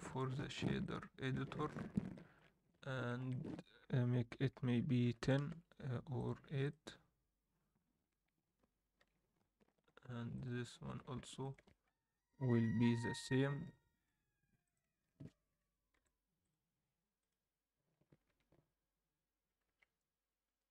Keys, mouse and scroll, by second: 0.2-0.7 scroll down 4, 0.8 shift+middle click, 1.5-2.0 scroll up 4, 2.1 shift+middle click, 3.0-6.1 shift+drag, 9.0 alt+a, 10.3-11.1 drag, 11.4 shift+click, 12.3 ctrl+l, 13.9 alt+a, 14.6 click, 14.9 Tab, 15.1 a, 15.9 u, 18.3 Tab, 19.7 alt+a.